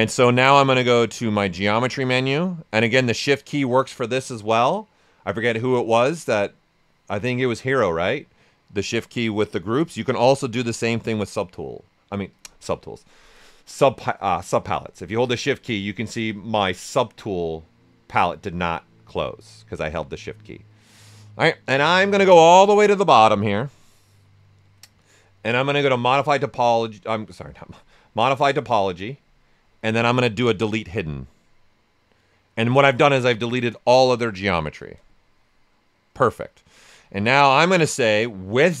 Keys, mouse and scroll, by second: 10.6-25.5 shift+drag, 35.2-37.0 drag, 37.0 right click.